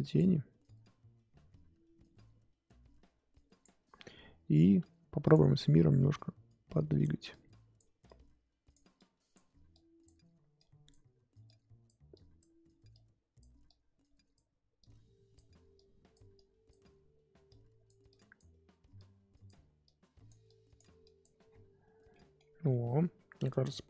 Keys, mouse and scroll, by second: 16.9-17.5 scroll down 1, 17.5-21.4 drag, 21.4-22.1 scroll down 1, 22.1 middle click, 22.6 scroll down 1, 22.7 middle click, 23.2-23.8 scroll up 2.